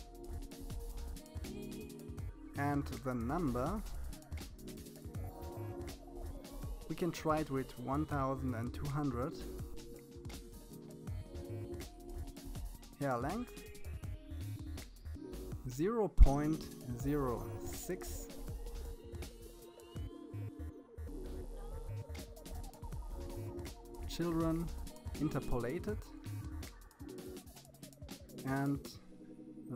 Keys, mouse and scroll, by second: 3.8-5.4 drag, 6.0 0, 11.5-13.0 drag, 19.8-23.1 scroll down 12, 24.3 click, 25.0-26.4 scroll down 7, 26.4-28.0 scroll down 2, 29.2-29.7 drag.